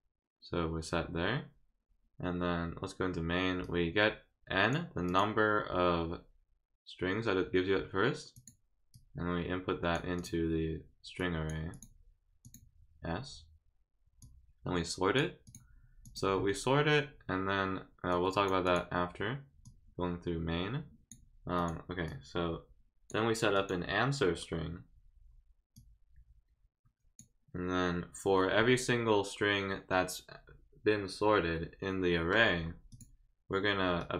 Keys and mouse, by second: 3.6-4.7 drag, 5.1 click, 8.3 click, 8.9-9.9 drag, 10.2 click, 11.2 click, 11.7 click, 12.4 click, 14.2 click, 15.4 click, 16.0 click, 18.1 click, 18.6 click, 19.6-21.1 drag, 21.6 click, 22.1-23.1 drag, 23.5 click, 25.7-27.2 drag, 32.9 click, 34.0 click.